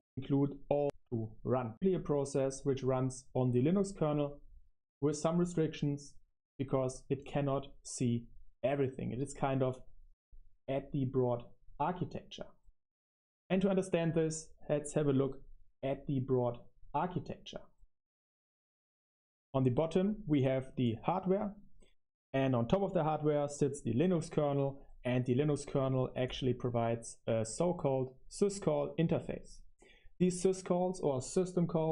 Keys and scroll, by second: 10.0 Right, 12.9 Left.